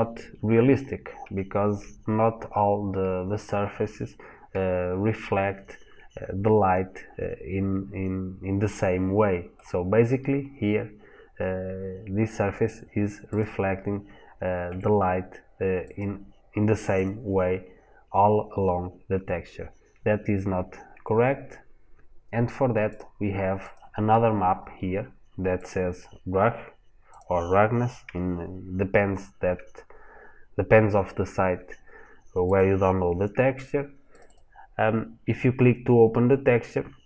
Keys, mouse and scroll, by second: 9.4 middle click, 13.1 click, 14.5 g, 15.8 click.